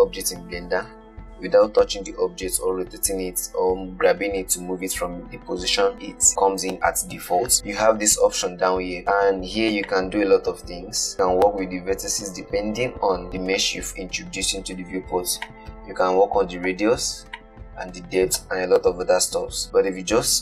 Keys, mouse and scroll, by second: 1.2-4.3 scroll down 1, 6.7-8.6 drag, 10.2-13.2 drag, 15.8-20.0 drag.